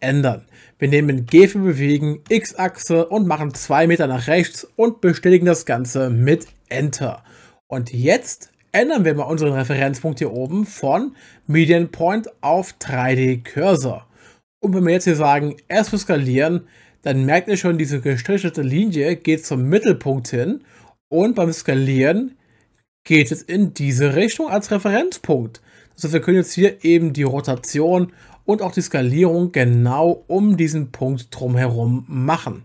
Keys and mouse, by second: 1.3 g, 2.3 x, 3.5 2, 6.4 Return, 10.3-13.1 drag, 15.9 s, 27.6 Escape, 28.2 r, 30.1 z.